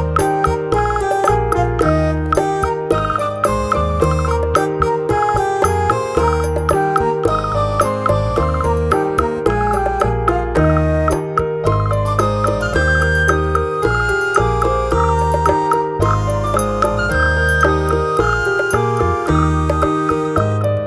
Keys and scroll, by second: 13.0 ctrl+8.